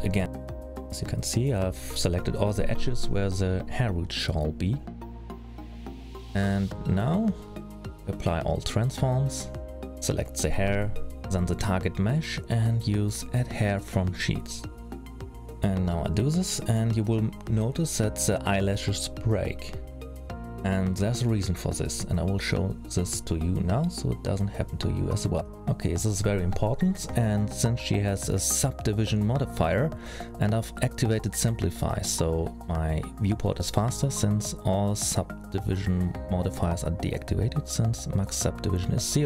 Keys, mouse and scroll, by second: 0.9-2.6 scroll up 4, 1.2 middle click, 2.6 scroll down 3, 3.4 click, 4.4 middle click, 5.0 click, 5.6 click, 6.4 click, 6.9 scroll down 4, 7.2-8.2 scroll up 3, 8.5 ctrl+a, 12.3-12.9 scroll down 3, 12.8-14.1 scroll up 2, 14.1 middle click, 14.1-14.8 scroll up 1, 15.4 shift+click, 17.2 click, 19.3-19.8 scroll up 2, 19.8 middle click, 21.9-22.5 scroll up 3, 23.2 middle click, 23.8-24.8 scroll down 4, 24.8 scroll up 2, 25.3 scroll down 1, 25.8 middle click, 28.1 click, 30.2 click, 32.4-33.2 scroll down 2, 33.2 click, 33.7-35.4 scroll down 2.